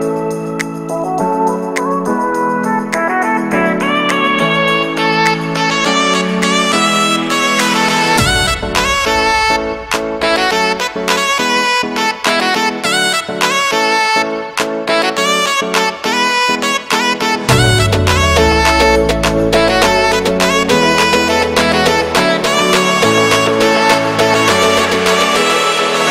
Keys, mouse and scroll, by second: 0.8 ctrl+KP_1, 1.4-1.7 scroll down 5, 1.7 s, 3.5 scroll down 1, 3.7 s, 6.0 middle click, 6.6-7.4 scroll up 2, 6.7 Tab, 7.4 g, 7.7 middle click, 8.5 g, 9.0 shift+middle click, 9.5 scroll down 6, 9.8 middle click, 10.3 scroll up 2, 10.5 shift+middle click, 10.9 scroll down 1, 11.0 shift+middle click, 11.8-12.2 scroll down 1, 12.2 Tab, 12.9 ctrl+KP_1, 13.6 z, 14.1 shift+middle click, 14.2 scroll up 3, 14.4 ctrl+r, 15.1 shift+middle click, 15.3-15.6 scroll up 5, 15.6 g, 16.5 shift+middle click, 16.8 ctrl+b, 17.7 scroll down 3, 17.8 shift+middle click, 18.2 scroll up 2, 18.4 z, 18.6 shift+middle click, 18.8 scroll up 1, 19.1 alt+e, 21.0 scroll down 1, 21.1-23.2 middle drag, 23.2 /, 24.2 KP_Decimal, 24.6 scroll up 1, 24.7-26.1 middle drag.